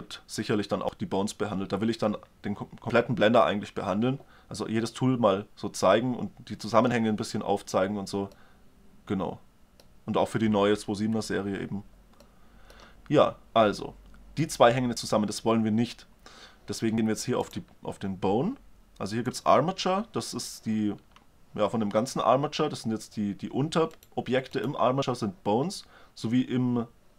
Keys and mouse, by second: 12.6-17.1 drag, 17.6-21.5 drag, 24.2-26.7 drag.